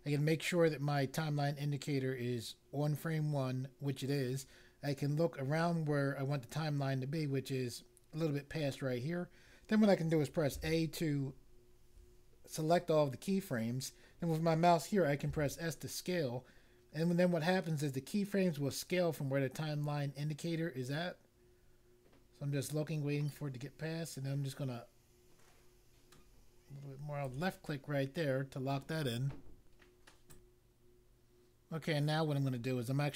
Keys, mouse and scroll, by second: 10.5 a, 15.3 s, 27.2 click, 30.3 click.